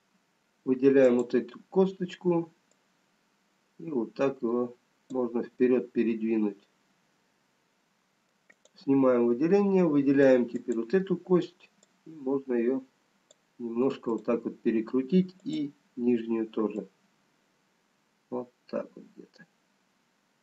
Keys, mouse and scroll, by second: 2.0 click, 3.1 click, 6.0 middle click, 9.1 click, 12.2 click, 14.2 click, 15.5 click.